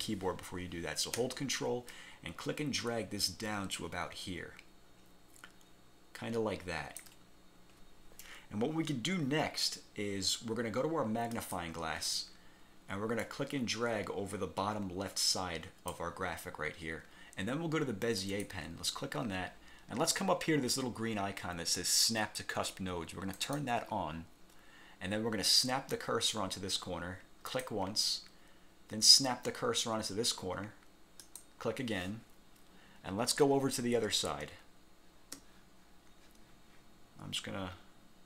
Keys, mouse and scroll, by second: 0.0 ctrl+z, 2.0-7.3 ctrl+drag, 11.4 click, 13.3-16.2 drag, 18.3 click, 23.5 click, 27.6 click, 31.3 click, 34.6 space.